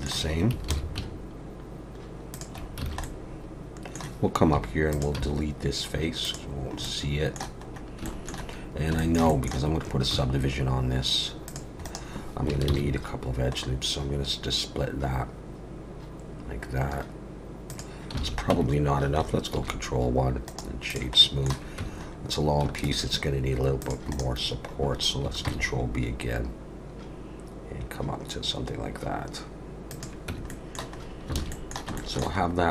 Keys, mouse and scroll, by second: 0.7 ctrl+b, 2.7 scroll down 3, 2.8 alt+a, 3.0 middle click, 4.6 3, 4.9 click, 5.1 x, 6.5-6.8 scroll down 4, 6.8 middle click, 7.6 scroll up 2, 8.0 shift+middle click, 8.4 scroll down 2, 9.0 shift+middle click, 9.3 middle click, 10.1 ctrl+r, 12.7 ctrl+b, 18.2 alt+a, 18.5 Tab, 19.6 ctrl+1, 20.4 right click, 21.2 middle click, 21.8 Tab, 22.0-22.6 scroll up 1, 22.6-22.9 scroll up 1, 22.9 ctrl+r, 24.5 scroll down 5, 25.4 ctrl+b, 30.3 Tab, 30.5 middle click, 31.0 scroll up 3, 31.3 alt+a, 31.5 middle click, 31.9 shift+middle click, 32.4-32.7 scroll up 1.